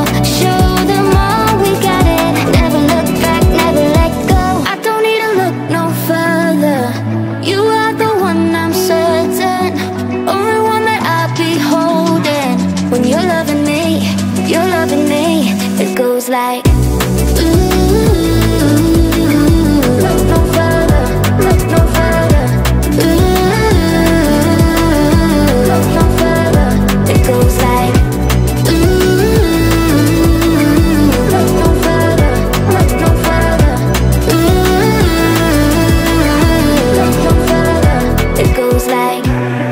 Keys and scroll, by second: 1.9 Left, 3.1 Right, 22.5-31.4 typing.